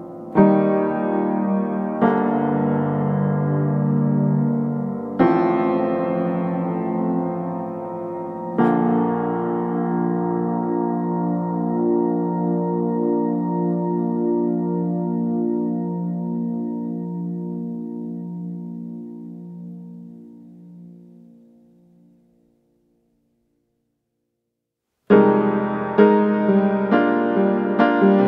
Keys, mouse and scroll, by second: 1.3 right click, 1.5 scroll down 1, 1.6 scroll up 1, 1.9 click, 5.0 scroll down 1, 5.1 scroll up 1, 5.4 click, 6.5 scroll down 1, 6.8 click, 7.1 middle click, 7.4 click, 7.6 right click, 8.2 scroll up 1, 8.5 click, 8.6 right click, 8.8 scroll up 1, 9.0 click, 9.1 right click, 9.6 click, 10.7 right click, 10.9-11.4 scroll up 1, 11.4-28.2 drag.